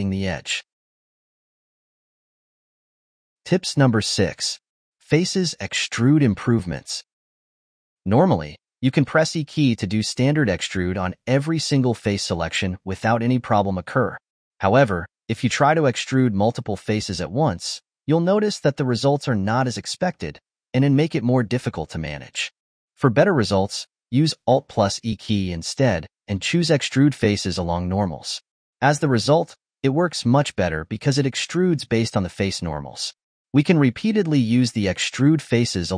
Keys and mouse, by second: 2.3 click, 2.6 g, 3.2 middle click, 6.1 Tab, 7.0 click, 8.6 e, 9.8 click, 10.1 shift+click, 10.4 e, 11.4 click, 11.6 shift+click, 11.9 shift+click, 12.1 shift+click, 12.3 e, 13.3 click, 13.5 e, 14.5-15.0 ctrl+z, 15.3 shift+click, 15.6 shift+click, 15.9 shift+click, 16.2 shift+click, 16.5 shift+click, 17.0 shift+click, 17.3 shift+click, 18.1 e, 21.3 g, 22.5 ctrl+z, 22.9 ctrl+z, 24.4 alt+e, 33.5 alt+e.